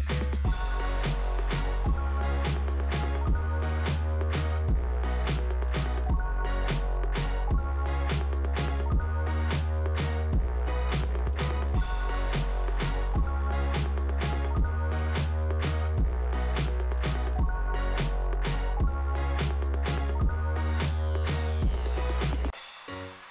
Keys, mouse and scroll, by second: 0.5 click, 1.1 click, 3.0 click, 8.4 click, 9.4 click, 18.3 scroll down 2, 20.9-22.0 scroll up 2, 22.5 click.